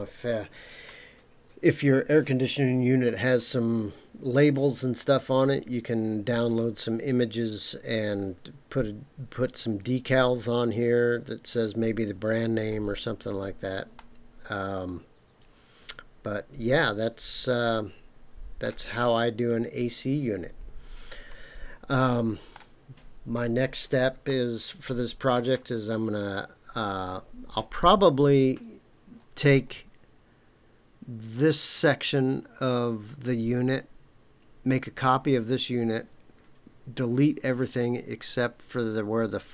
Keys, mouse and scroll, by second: 12.5-13.5 scroll down 3, 13.9-18.7 middle drag, 18.9 scroll down 2, 21.0 click, 22.0 middle click, 24.2-25.3 shift+middle drag.